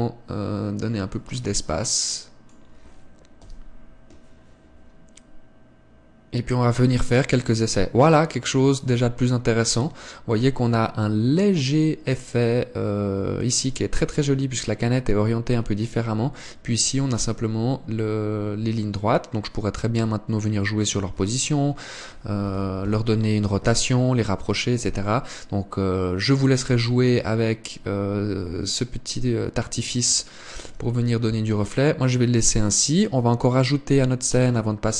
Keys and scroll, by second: 22.0 Escape, 23.3 KP_7.